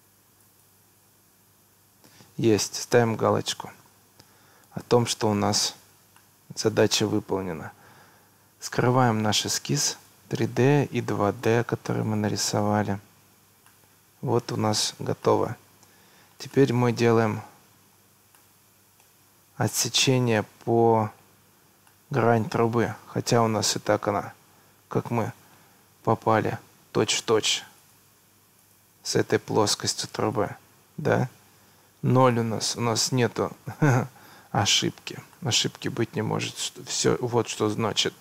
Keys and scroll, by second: 7.0 Escape, 33.3 Escape.